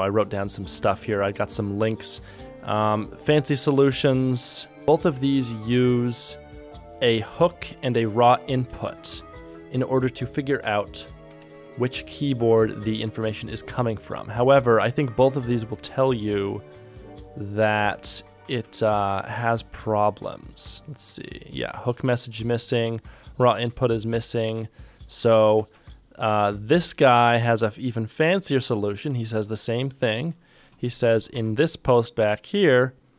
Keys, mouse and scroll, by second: 4.8 ctrl+click, 8.7 ctrl+Tab, 11.4 ctrl+Tab, 18.7 ctrl+shift+Tab, 25.6 ctrl+shift+Tab, 27.7 ctrl+click, 28.6 ctrl+click, 29.1 ctrl+Tab.